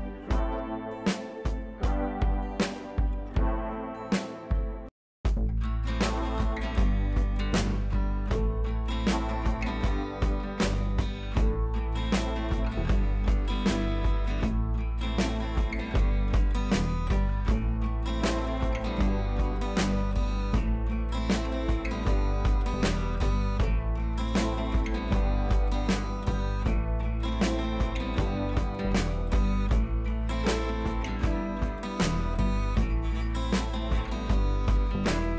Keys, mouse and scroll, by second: 0.6-1.8 alt+drag, 1.8 Left, 3.5 scroll down 1, 4.2 click, 5.7-6.0 scroll up 1, 6.0 click, 8.1 b, 9.2-12.2 drag, 13.6 ctrl+z, 14.2 [, 14.3 [, 14.5 [, 14.6 [, 15.3-21.4 drag, 31.6 click, 33.9 typing, 34.4 click.